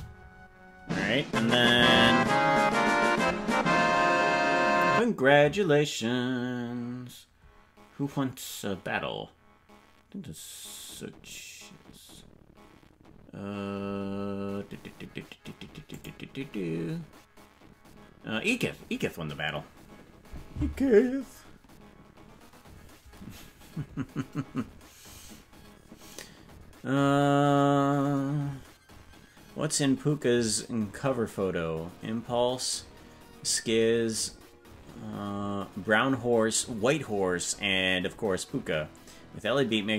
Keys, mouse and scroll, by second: 4.4 ctrl+s.